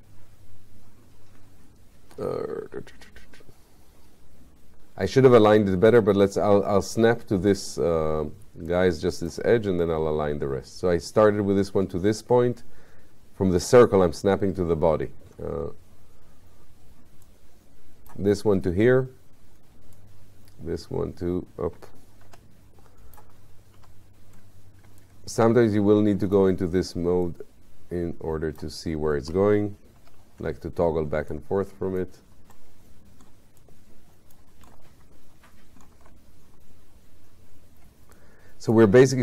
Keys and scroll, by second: 22.3 4, 30.0 5.